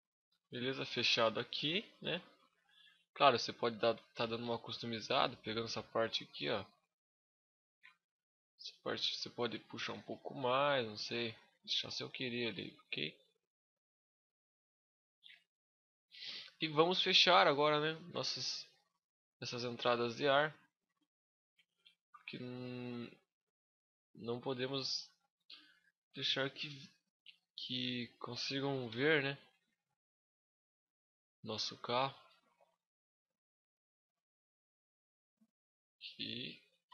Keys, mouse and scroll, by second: 0.2 shift+middle click, 0.5 middle click, 1.8 Tab, 2.1 middle click, 2.7 scroll up 1, 3.5 click, 3.5 scroll up 1, 5.5 alt+right click, 7.7-8.2 scroll down 2, 8.0 middle click, 9.1 click, 11.5 middle click, 12.1 Tab, 12.6 middle click, 13.3 Tab, 13.8 Tab, 14.3 middle click, 16.2 scroll down 5, 16.4 shift+middle click, 17.0 middle click, 17.4 scroll up 2, 18.1 scroll up 8, 18.6 middle click, 18.6-19.0 scroll down 5, 19.3 shift+scroll up 1, 19.3 shift+middle click, 19.9 middle click, 20.3-20.8 scroll up 4, 20.7 shift+middle click, 21.6 Tab, 23.4 click, 25.7 middle click, 27.1 right click, 28.6 shift+d, 29.2 right click, 29.7 click, 31.0 middle click, 31.0 scroll up 1, 31.7 shift+middle click, 32.2 KP_Decimal, 32.8-33.7 scroll down 10, 33.9 middle click, 35.0 click, 36.0 click, 36.6 z.